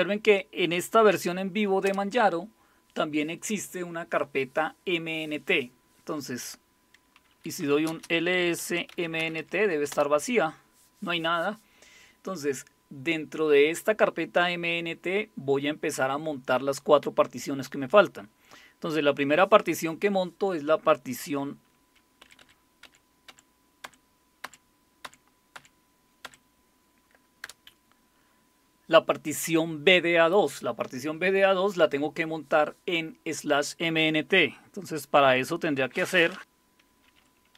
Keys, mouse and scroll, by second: 0.9-1.8 typing, 7.4-9.7 typing, 9.9 Return, 22.2 Up, 22.4 Up, 22.8 Up, 23.3 Up, 25.0 Up, 27.4 Return.